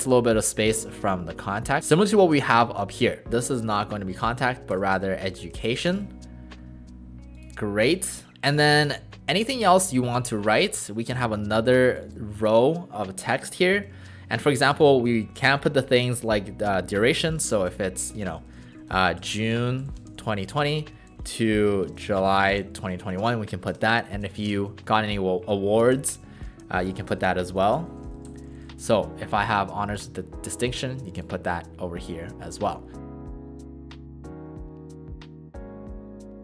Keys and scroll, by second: 3.3 ctrl+a, 4.2 e, 4.7 BackSpace, 13.9 ctrl+a, 17.3 shift+j, 18.2 BackSpace, 18.3 BackSpace, 19.8-22.5 typing, 23.7 Return, 23.7-29.2 typing, 34.2-36.4 typing.